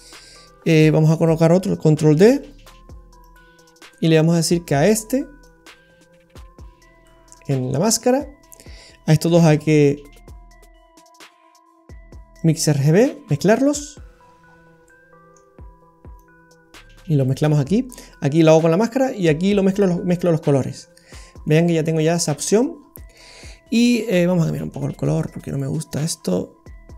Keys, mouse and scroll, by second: 1.1 click, 2.3 shift+d, 3.7 scroll down 1, 3.9 middle click, 5.5 click, 7.4 middle click, 8.1 scroll up 1, 8.7-9.3 scroll up 1, 9.4 shift+a, 14.4-15.0 scroll up 8, 14.9 middle click, 16.2 click, 20.0 scroll down 3, 20.1 middle click, 21.1 scroll down 1, 21.4 middle click, 23.0 scroll down 4, 23.2 middle click, 23.5 scroll up 1, 23.7-24.3 scroll down 2, 24.5-25.0 scroll up 8, 25.4 click.